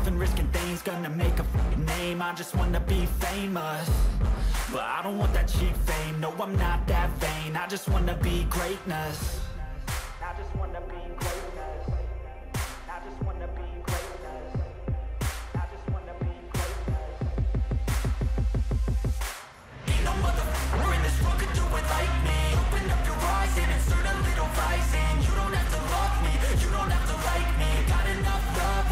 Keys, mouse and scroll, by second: 5.1 ctrl+i, 11.6 Delete, 17.4 double click, 23.1-23.6 typing.